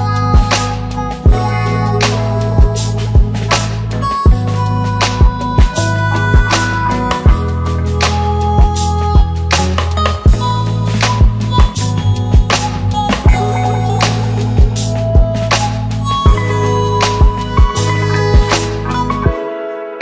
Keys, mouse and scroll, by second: 2.0-4.2 drag, 8.3 click, 9.4-9.7 click, 10.2-10.6 click, 11.2 click, 13.4 click, 14.6-14.9 click, 18.0 click, 19.0-19.9 click.